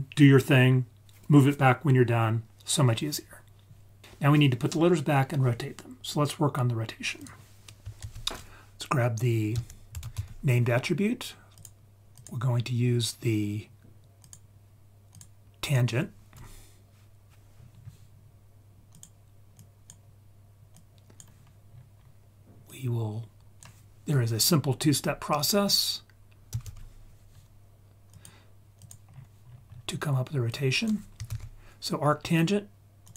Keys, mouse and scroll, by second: 6.7-7.2 scroll up 3, 7.2 click, 8.0 shift+a, 14.2-15.2 drag, 15.6-19.0 drag, 19.6-20.0 drag, 20.8 click, 21.7-22.7 scroll up 3, 22.7 click, 23.1-28.3 drag, 28.8 click, 29.1-29.7 scroll down 2, 29.5-30.5 scroll up 4, 30.5-33.1 drag.